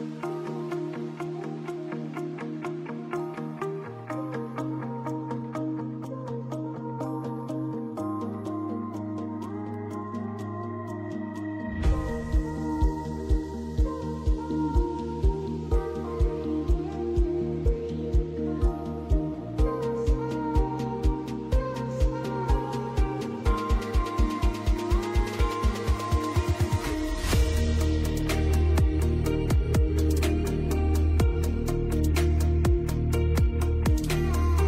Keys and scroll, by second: 0.6 ctrl+g, 1.4 e, 4.5 Escape, 17.1 space, 18.6 Delete, 30.4 Escape.